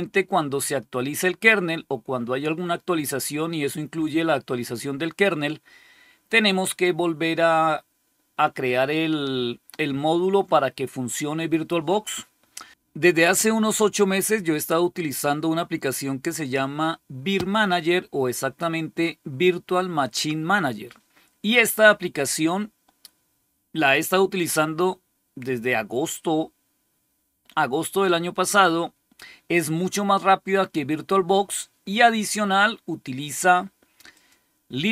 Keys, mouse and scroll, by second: 34.0 click.